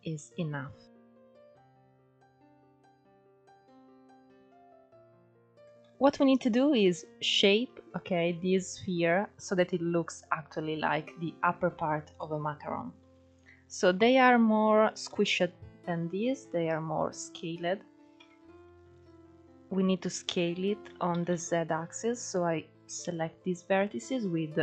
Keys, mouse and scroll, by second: 0.0-0.8 scroll up 1, 0.8-1.7 middle drag, 1.7 KP_1, 2.7-4.2 middle drag, 4.2 ctrl+2, 4.6-5.2 scroll down 4, 5.2 Tab, 5.5-6.8 middle drag, 6.8-7.3 scroll up 4, 7.3-7.7 scroll down 4, 7.7-8.2 scroll up 2, 8.2-13.6 middle drag, 13.6 KP_1, 14.3-14.7 scroll up 2, 14.7 shift+middle click, 15.7-16.2 scroll down 1, 16.2-17.1 scroll down 2, 17.1-17.9 scroll up 2, 17.9 Tab, 19.8 ctrl+1, 20.8 alt+z, 21.4 click.